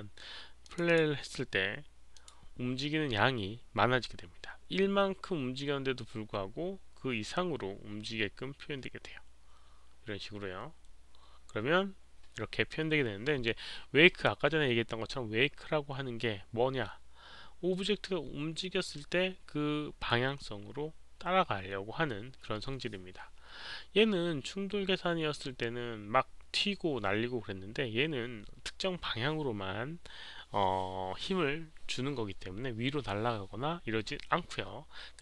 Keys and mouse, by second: 0.6 click, 0.8 click, 2.1 click, 9.3 Return, 9.3 click, 9.3 KP_0.